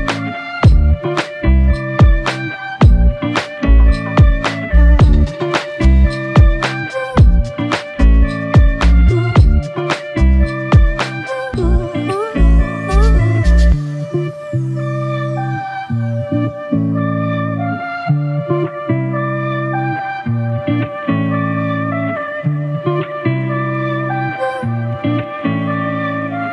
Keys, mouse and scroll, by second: 0.0 alt+shift+click, 1.8 shift+click, 3.0 f, 3.8 double click, 9.0 alt+click, 13.6 alt+click, 14.1 alt+shift+click, 15.0 shift+click, 17.3 alt+click, 19.7 double click, 21.9 shift+click.